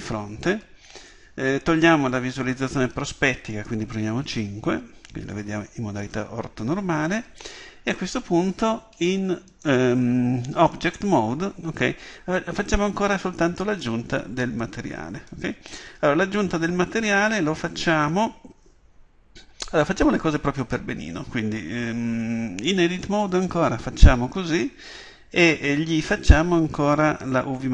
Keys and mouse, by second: 4.1 KP_5, 9.5-11.2 drag, 11.2-23.2 middle drag, 23.2 Tab.